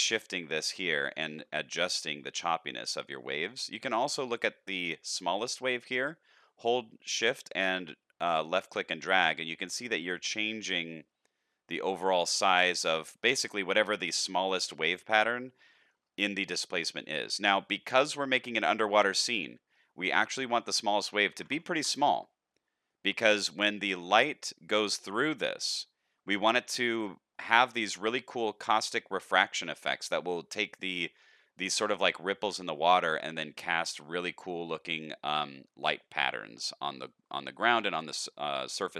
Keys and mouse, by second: 1.5-3.5 shift+drag, 5.7-14.9 shift+drag, 15.5-15.9 shift+middle drag, 16.8 shift+middle click, 18.0 shift+middle drag, 18.5-19.7 middle drag, 20.5-22.2 drag, 22.8-23.3 middle drag, 23.7 middle click, 26.3 middle click, 27.3 middle drag, 32.9 middle click, 38.3 shift+middle drag, 38.7 middle drag.